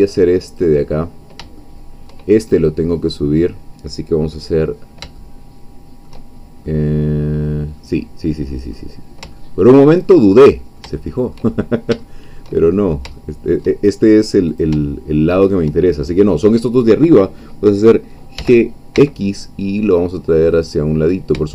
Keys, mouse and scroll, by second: 0.6 click, 1.6 shift+middle click, 4.5-6.2 middle drag, 6.3 shift+scroll down 2, 6.7-8.7 middle drag, 8.7-9.2 scroll up 2, 9.5-11.5 shift+middle drag, 11.6 shift+middle click, 12.1 shift+middle click, 13.2 shift+middle click, 14.6-15.6 shift+drag, 18.4 g, 18.9 x.